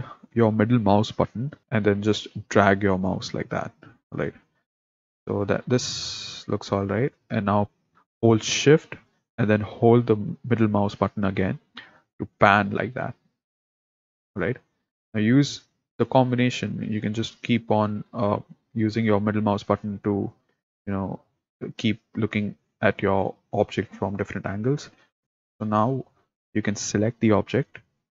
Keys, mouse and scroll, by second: 10.9-14.0 shift+middle drag, 15.2-22.7 middle drag, 24.1-25.2 middle drag, 25.2 click, 25.3 middle click, 26.9 click.